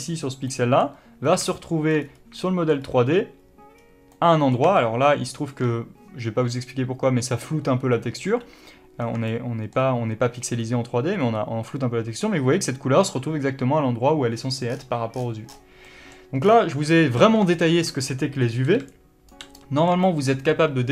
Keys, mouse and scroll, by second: 0.8 middle click, 1.6 scroll up 1, 1.9 shift+middle click, 2.4-2.8 scroll up 1, 2.8 shift+middle click, 3.2-3.5 scroll up 1, 4.1-4.5 scroll down 1, 4.5 middle click, 9.0 scroll up 1, 9.3-9.7 scroll down 1, 9.7 shift+middle click, 16.1-17.6 middle drag, 16.8-17.4 scroll down 1, 17.4 alt+a, 17.6 scroll down 1, 18.8 middle click, 19.3 right click, 19.9-20.9 middle drag.